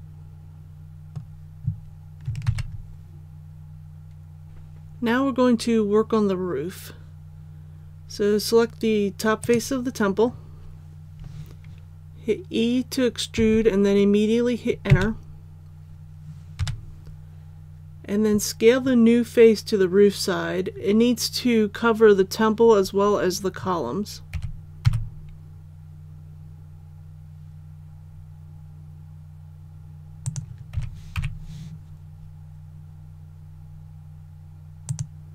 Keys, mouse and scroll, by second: 2.5 ctrl+s, 4.4 click, 9.4 right click, 13.4 e, 16.6 KP_7, 24.3 s, 24.8 x, 30.2 click, 30.7 s, 31.2 y, 34.9 click.